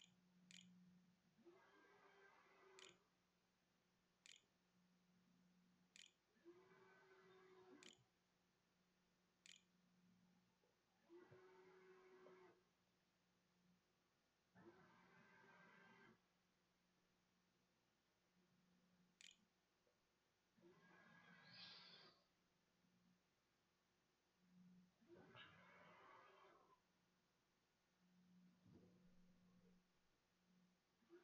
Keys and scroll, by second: 0.0-1.4 typing, 2.4 Tab, 2.7-5.8 typing, 7.6 o, 9.3 t, 10.2 q, 10.2 Tab, 18.8 a, 20.2-21.8 typing.